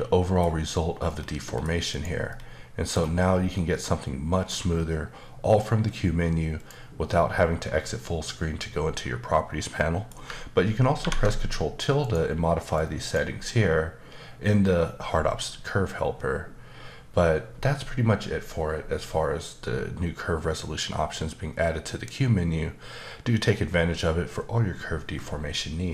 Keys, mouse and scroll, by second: 1.1 middle click, 1.9 click, 2.3 middle click, 3.0 scroll up 1, 3.5 middle click, 6.6 click, 8.9 middle click, 12.0 click, 12.7 click.